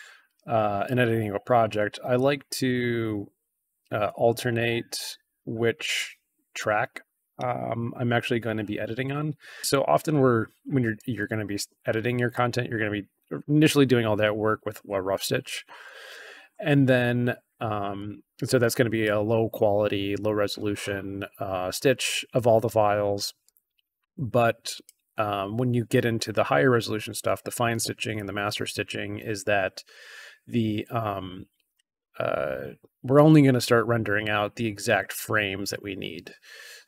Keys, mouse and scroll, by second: 2.1-2.6 drag, 4.4 click, 8.4-9.6 drag, 10.9-12.3 drag, 17.9-18.9 drag, 21.8 click, 23.4-24.7 drag, 36.7 scroll up 1.